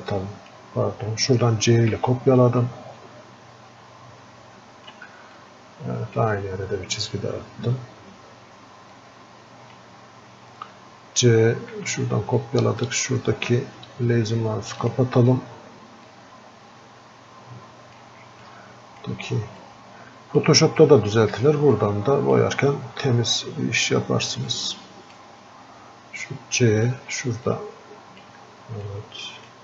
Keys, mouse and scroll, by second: 16.5 typing, 18.8 typing.